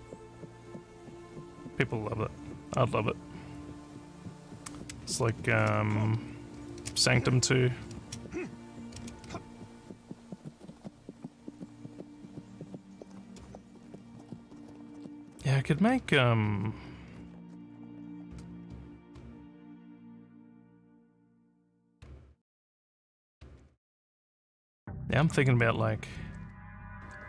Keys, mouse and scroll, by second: 5.3-7.8 typing, 9.0 space, 9.1 a, 10.7 w, 16.0-19.8 typing, 21.5-23.4 typing, 25.2 w, 26.3-27.2 typing.